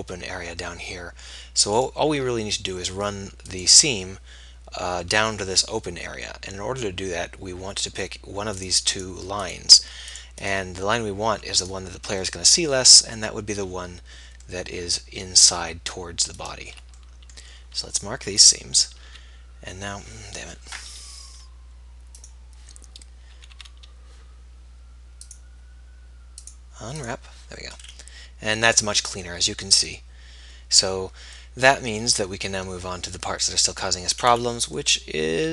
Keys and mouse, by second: 2.1-5.7 drag, 6.4-7.6 middle drag, 8.5-13.1 middle drag, 16.7-18.7 drag, 18.7 middle click, 19.2 click, 19.4 a, 20.0 a, 23.6 a, 23.8 a, 31.6 middle click, 32.4-35.5 middle drag.